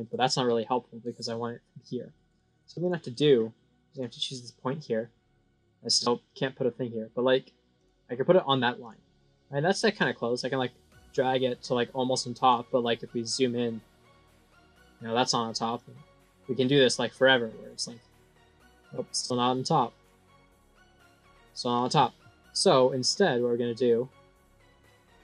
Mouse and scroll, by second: 2.2 right click, 2.7 click, 3.8 click, 7.7 click, 8.2 right click, 8.7 click, 9.9-12.4 drag, 12.7 scroll up 3, 13.2-14.5 scroll down 17, 15.7 click, 17.8-18.5 scroll down 16, 19.1-19.9 drag, 20.2 scroll, 20.5 scroll, 21.1 scroll, 21.6-22.2 scroll down 5, 23.0-23.6 drag, 23.8 scroll, 24.1 scroll, 24.3 scroll, 24.6 scroll, 24.6 scroll.